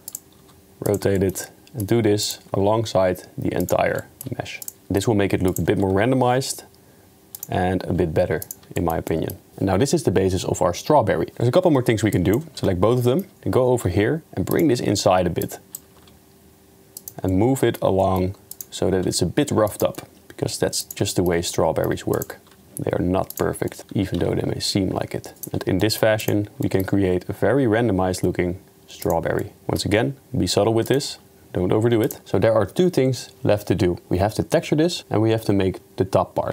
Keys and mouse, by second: 0.4 r, 1.2 middle click, 1.5 middle click, 2.2 click, 2.7 r, 4.0 middle click, 4.9 click, 4.9 middle click, 4.9 r, 5.5 click, 5.8 r, 7.9 s, 8.8 shift+middle click, 12.3 click, 12.6 Tab, 13.1 shift+middle click, 13.9 g, 15.5 click, 16.0 g, 17.3 middle click, 18.0 shift+middle click, 18.5 click, 19.0 g, 20.0 middle click, 20.2 g, 21.1 middle drag, 21.5-21.9 middle drag, 23.2 g, 23.7 middle click, 23.9 g, 25.8 middle click, 26.2 click, 26.6 middle click, 27.0 g, 29.6 middle click, 30.0 g.